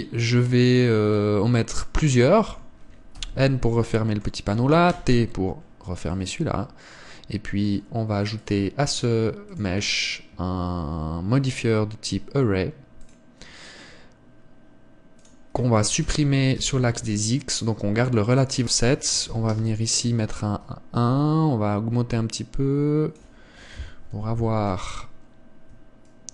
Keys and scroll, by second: 4.0 n, 5.7 t, 25.0 KP_7.